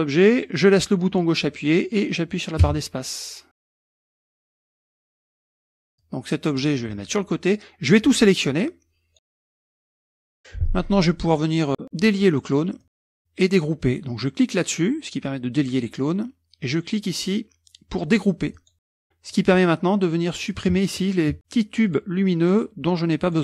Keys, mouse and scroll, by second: 2.7 space, 3.6-3.9 scroll up 2, 3.9 space, 4.3 space, 4.6 space, 5.3 middle click, 5.3 scroll down 1, 5.5 KP_Subtract, 5.7 KP_Subtract, 6.0-6.9 drag, 6.9 middle click, 6.9-7.4 scroll up 1, 7.9-9.3 drag, 9.5-9.9 scroll up 1, 12.8 click, 14.0-15.2 middle drag, 18.5 click, 19.3-19.8 drag, 20.5-21.1 drag, 21.4 shift+click, 21.9-22.4 shift+drag, 22.5-23.0 shift+drag, 23.3-23.4 shift+drag.